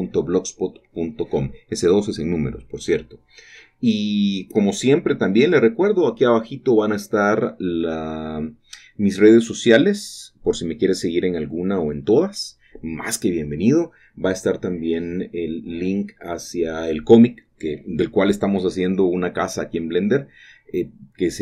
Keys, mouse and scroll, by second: 2.9 shift+click, 7.5 shift+click, 8.1-8.7 scroll up 1, 8.7 typing, 10.5 shift+click, 11.6 typing, 13.4 click, 14.1-15.2 scroll down 1, 15.4 shift+middle click, 16.6-17.5 scroll down 2, 18.3-19.3 middle drag, 19.4 shift+middle click, 19.6 shift+middle click, 19.8-21.4 shift+middle drag.